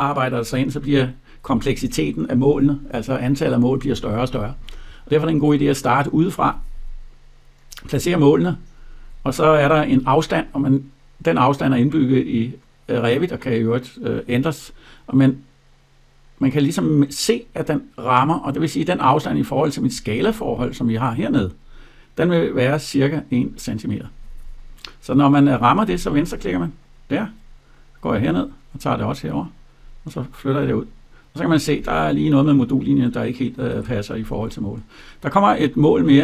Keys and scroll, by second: 33.3 Escape.